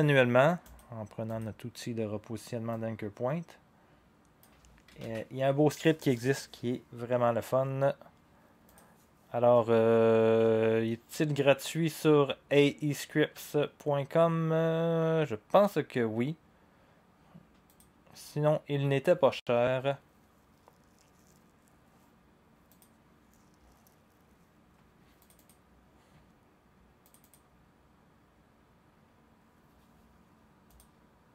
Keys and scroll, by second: 5.0 ctrl+z.